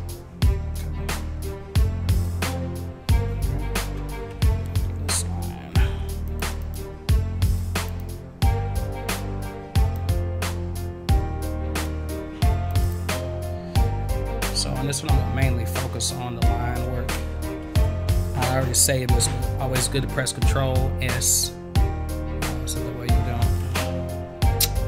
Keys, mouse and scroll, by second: 4.3 v, 6.2 click, 6.6 click, 7.8 click, 8.0-9.9 drag, 11.8 click, 12.8 click, 15.4 scroll up 1, 17.6 ctrl+s.